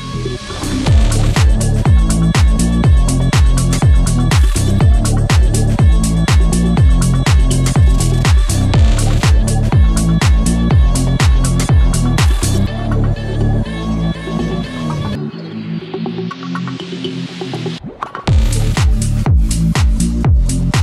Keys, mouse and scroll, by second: 0.5 click, 2.0-6.8 drag, 6.8 scroll up 1, 7.0-9.2 drag, 9.2-9.6 scroll down 1, 9.6 click, 15.3 ctrl+z, 16.9 click, 17.1 ctrl+z, 17.5 click, 20.2 scroll up 1.